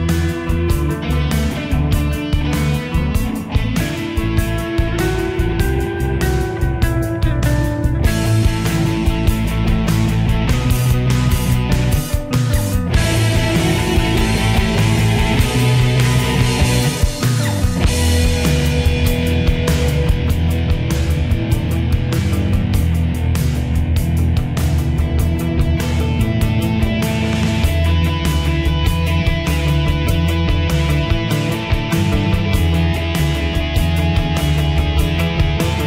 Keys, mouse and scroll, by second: 0.1 click, 4.1 ctrl+u, 5.3-11.9 drag, 15.5 shift+Page_Up, 17.7 ctrl+z, 18.8 ctrl+u, 19.4 Escape, 19.7-21.0 drag, 21.0 ctrl+z, 22.7 shift+Page_Down, 24.9 shift+click, 26.5 shift+Page_Up, 28.0-33.9 drag.